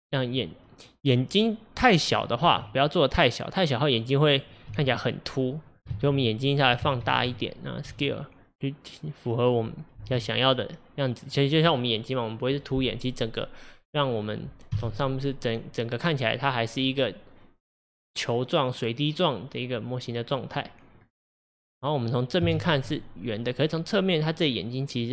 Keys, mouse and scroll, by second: 2.5 s, 4.7 g, 6.0 ctrl+z, 6.9 ctrl+z, 8.0 s, 10.0 g, 12.6-14.2 middle drag, 14.2-14.8 scroll down 2, 14.8 KP_7, 17.0-20.1 middle drag, 20.5-20.8 scroll up 2, 21.0 scroll down 1, 21.4-22.4 middle drag, 22.4 KP_1, 23.3-23.6 scroll up 2, 23.6-24.5 middle drag, 24.5-25.1 scroll down 2.